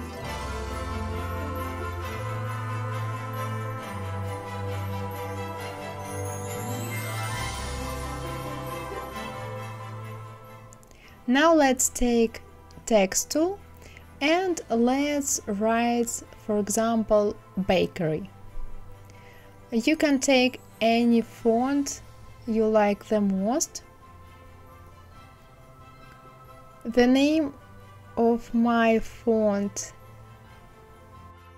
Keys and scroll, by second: 6.0 ctrl+c, 6.2 ctrl+v, 19.5 shift+b, 21.4-23.7 typing.